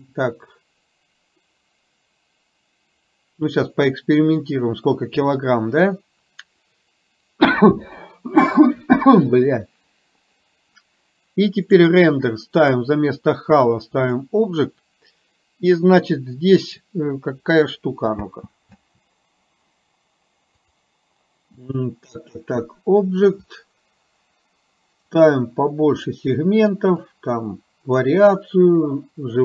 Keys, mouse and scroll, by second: 11.7 click, 12.8 click, 18.3 space, 18.9 space, 20.7 click, 25.2 click, 27.2 click.